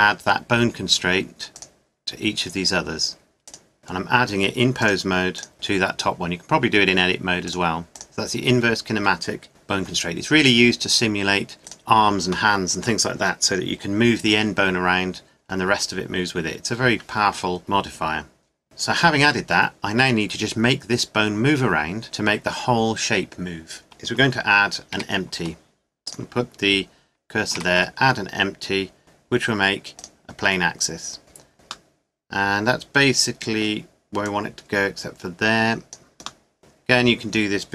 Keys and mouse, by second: 2.0-3.3 middle drag, 9.5 g, 10.8-13.5 drag, 14.3 g, 24.9 shift+a, 26.0-28.0 drag, 27.5 shift+a, 33.4 middle click, 35.9 click, 36.2 middle click, 36.4-37.7 drag.